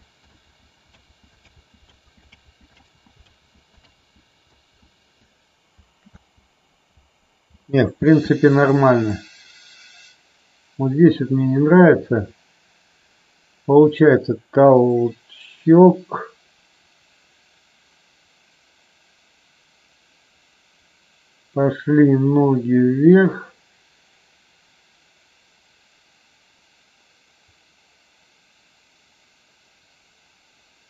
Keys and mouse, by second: 0.3 ctrl+z, 1.0 ctrl+z, 1.4 ctrl+z, 2.3 ctrl+z, 3.8 ctrl+z, 4.7 ctrl+z, 6.0 space, 8.0 space, 9.1-30.8 drag.